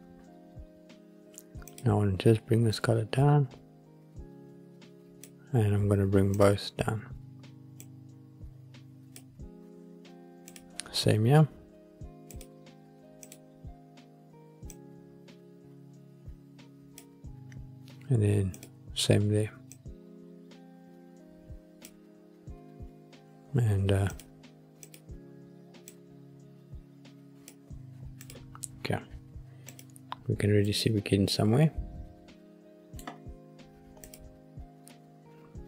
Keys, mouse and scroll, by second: 1.6 click, 6.3 drag, 10.4 click, 12.2 click, 13.1 click, 18.5 click, 24.7 click, 28.1 click, 29.6 click, 30.6-32.9 middle drag, 34.0 click.